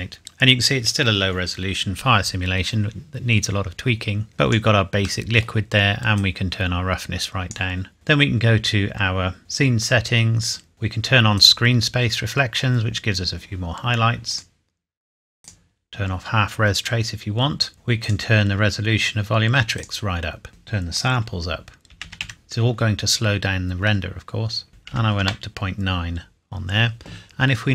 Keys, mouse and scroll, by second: 4.3 click, 4.9 scroll up 1, 6.1 click, 9.4 click, 11.3 click, 14.3 click, 17.7 click, 21.9 KP_1, 22.0 KP_2, 22.2 KP_8, 24.7 KP_Decimal, 24.9 KP_9, 25.2 KP_Enter.